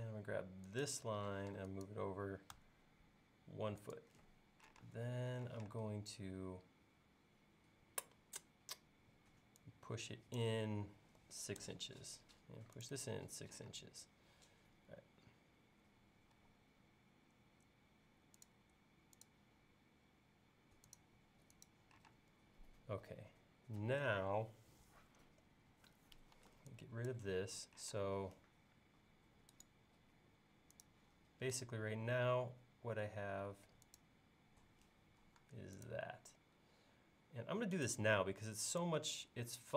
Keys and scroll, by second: 1.4 m, 5.6 p, 11.2 6, 11.6 Return, 13.8 space, 16.4 l, 22.1 space, 26.4 e, 28.0 space.